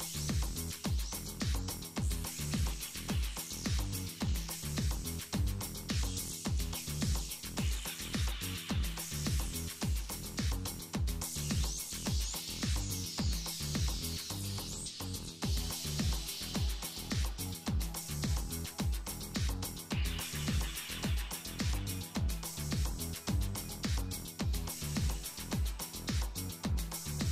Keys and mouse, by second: 1.9 s, 4.0 z, 4.2 Tab, 4.9 KP_7, 5.9 z, 6.4 z, 8.7-14.9 drag, 14.4-16.6 typing, 19.6 z, 19.8 z, 20.0 2, 23.3 1, 23.8 z, 25.2-27.3 drag, 26.5 z.